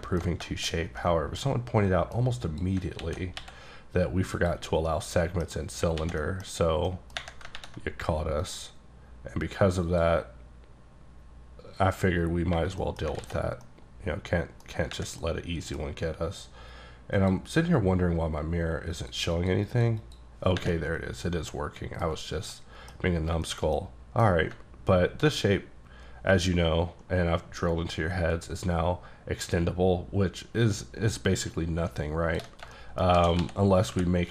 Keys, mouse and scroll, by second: 0.0 alt+middle click, 0.4 shift+middle click, 0.8 scroll down 1, 1.0 middle click, 2.5 click, 3.0 alt+x, 4.4 click, 4.9 middle click, 6.0 alt+x, 6.3 middle click, 6.9 middle click, 7.6 ctrl+`, 8.4 click, 9.9 click, 12.9 middle click, 13.2 alt+x, 13.6 middle click, 15.2 middle click, 17.2 click, 19.0 click, 19.7 double click, 20.0 click, 20.8-22.2 middle drag, 22.2 scroll up 1, 22.5 middle click, 22.9-23.4 scroll down 2, 23.4 shift+middle click, 24.1 middle click, 24.6 ctrl+middle click, 25.6 click, 32.6 shift+scroll down 1, 32.8 shift+middle click, 33.2 shift+d, 33.9 y.